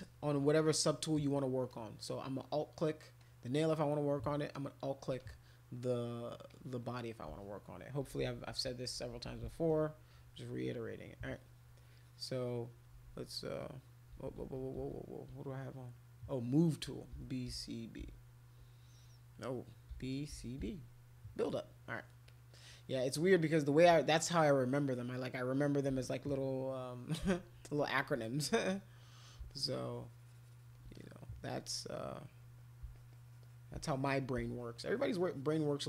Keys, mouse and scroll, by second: 0.6 alt+click, 1.2 alt+click, 1.7 alt+click, 2.4 alt+click, 3.2 alt+click, 4.5 alt+click, 5.2 click, 6.5 click, 8.0-9.4 typing, 11.3-12.6 shift+drag, 13.5 alt+click, 13.8 alt+click, 14.4 ctrl+z, 14.8 ctrl+z, 16.9-18.5 typing, 19.7-21.1 typing, 22.3 click, 23.8 [, 25.9 [, 28.4 alt+click, 28.7 alt+click, 29.5 shift+click, 29.7 shift+click, 30.9 click, 31.9 alt+click, 32.1 alt+click, 32.4 alt+click, 32.6 alt+click, 32.9 shift+click, 33.1 shift+click, 33.8 alt+click, 34.1 alt+click, 34.4 shift+click, 35.3 shift+click, 35.5 shift+click.